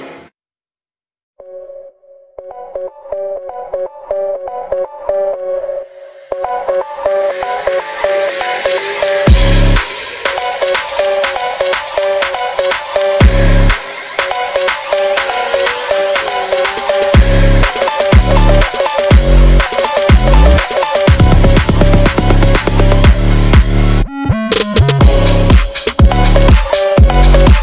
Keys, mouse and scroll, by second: 0.1 Left, 0.4 click, 0.7 r, 1.1 Left, 1.3 r, 2.6 g, 3.3 click, 3.6 r, 4.3 click, 5.0 r, 5.5 scroll up 4, 5.8 click, 6.2 s, 7.0 click, 7.2 r, 7.8 click, 8.0 click, 8.3 r, 8.7 g, 11.2 click, 11.7 r, 12.4 click, 13.0 click, 13.3 g, 13.6 click, 13.8 ctrl+z, 14.1 ctrl+z, 14.2 click, 14.4 g, 15.0 click, 15.2-15.7 scroll down 1, 15.9 g, 17.4 click, 17.6 g, 18.0 click, 18.1 click, 18.2 g, 20.3 click, 20.4 g, 20.8 click, 21.3 g, 21.7 g, 22.4 click, 23.0 g, 23.9 click, 24.0 g, 24.9 click, 25.0 g, 25.1 click, 25.1 g, 26.6 click, 26.8 g, 27.4 click, 27.4 g.